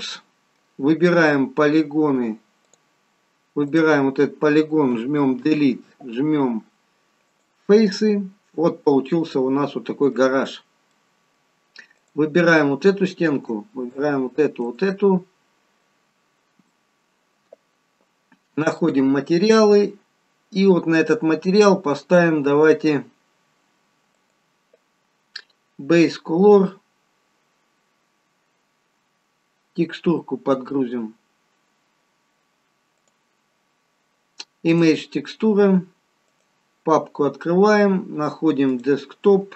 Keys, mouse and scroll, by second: 2.5 click, 3.6 click, 4.8 Delete, 10.3-10.6 scroll up 1, 10.8 middle click, 10.8-11.9 scroll up 2, 11.9 click, 12.5 middle click, 13.7 shift+click, 14.8 shift+click, 15.2-15.7 scroll down 1, 15.7 middle click, 19.0 click, 32.9 click, 36.2 click.